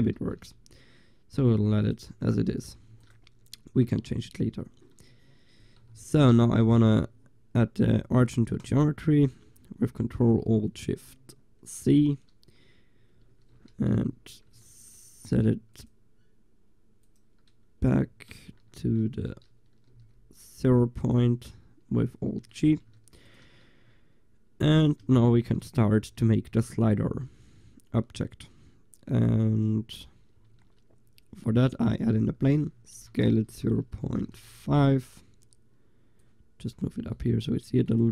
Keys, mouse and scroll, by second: 0.3 shift+z, 2.9 ctrl+s, 6.4 ctrl+alt+shift+c, 13.6 alt+g, 14.8 click, 17.2-18.0 drag, 18.8 alt+g, 19.3-20.0 drag, 20.0 g, 20.3 click, 20.7-21.3 drag, 22.2 drag, 23.3 ctrl+s, 25.5 a, 30.6 shift+a, 33.0 s, 36.3-38.1 drag.